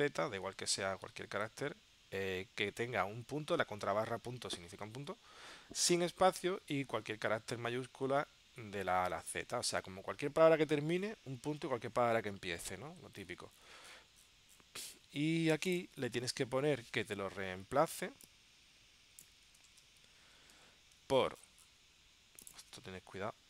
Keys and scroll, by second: 16.4 super+Tab, 19.7 super+c, 20.7 super+v.